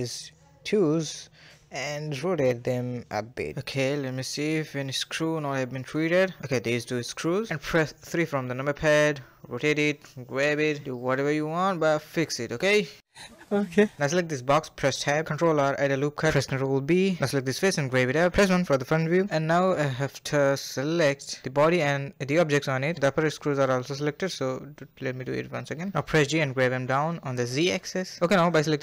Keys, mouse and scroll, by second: 0.0 shift+click, 0.5 KP_3, 0.9 shift+middle click, 1.0 scroll up 2, 1.3-1.7 shift+middle drag, 1.7 r, 2.3 g, 2.8 scroll up 1, 2.9 scroll down 1, 3.1-3.8 middle drag, 3.8-4.4 scroll down 6, 4.4-5.5 shift+middle drag, 5.5-6.1 scroll up 3, 6.1 click, 6.9 shift+click, 7.4 KP_3, 7.5 shift+middle click, 7.5 scroll up 2, 7.8 shift+middle click, 8.0 r, 8.6 g, 9.6-10.2 scroll down 9, 10.2-10.6 shift+middle drag, 10.6 scroll down 1, 10.8-11.8 middle drag, 11.8 a, 11.9 a, 12.3-13.0 middle drag, 14.1 middle click, 14.7 click, 15.4 Tab, 15.6 ctrl+r, 16.0 ctrl+b, 16.9 3, 17.0 click, 17.0 g, 17.7 KP_1, 17.8 scroll down 1, 17.9 Tab, 18.3 click, 19.4-20.7 middle drag, 20.7-21.3 scroll up 2, 21.3-22.3 middle drag, 22.3 KP_1, 22.7 a, 23.2 drag, 24.8-25.7 middle drag, 25.7-26.3 scroll up 1, 26.5 scroll down 3, 26.5 shift+middle click, 27.0 middle click, 27.2 click, 27.7 Tab, 27.8 middle click, 28.7 2.